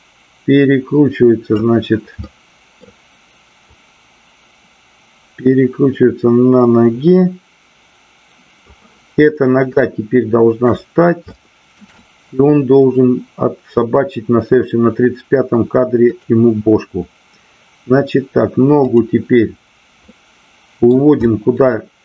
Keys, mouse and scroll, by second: 2.2-2.7 middle drag, 3.7-8.6 drag, 9.7-10.5 shift+middle drag, 11.5 shift+middle drag, 12.0-13.0 middle drag, 16.1 click, 18.7 click, 20.0 middle click, 21.2 middle click.